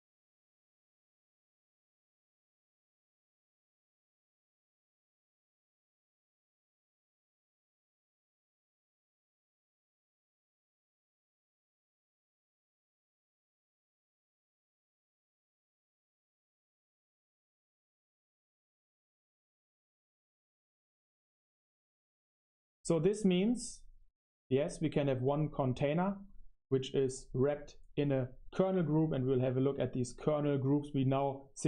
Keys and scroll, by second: 0.5 super+1, 5.4 super+3, 5.9-17.9 typing, 18.2 super+3, 18.9 super+7, 19.6 super+1, 19.8 super+3, 19.8 super+7, 19.8 super+1, 20.2 space.